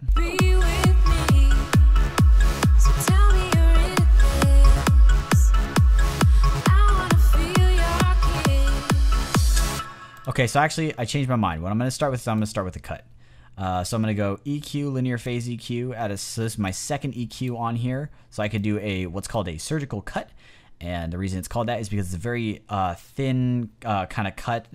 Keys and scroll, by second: 9.6 space.